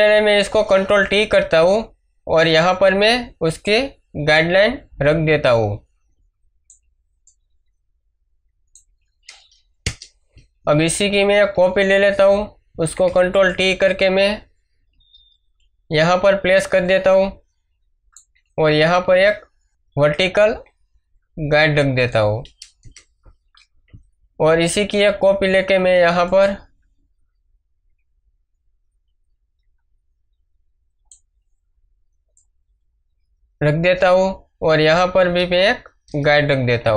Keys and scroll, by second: 0.9 ctrl+t, 9.8 Return, 11.5 ctrl+j, 22.8 Return, 24.9 ctrl+j, 36.0 Return.